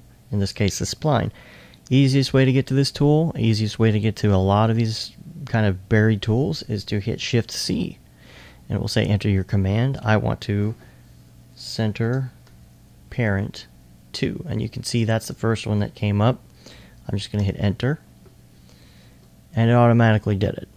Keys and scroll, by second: 7.1-7.9 typing, 11.1 typing, 12.3-13.0 typing, 17.4 Return.